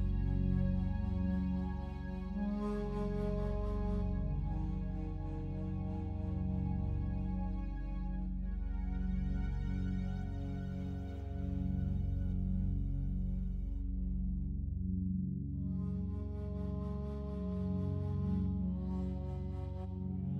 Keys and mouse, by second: 0.3 shift+click, 1.7-4.5 drag, 4.5-5.7 typing, 7.8 shift+click, 8.7 click, 9.1 typing, 10.5 space, 11.3-11.7 drag, 12.4 shift+d, 13.2 click, 13.8 click, 13.8-14.2 typing, 16.7 typing, 17.4 click, 17.8-18.7 typing.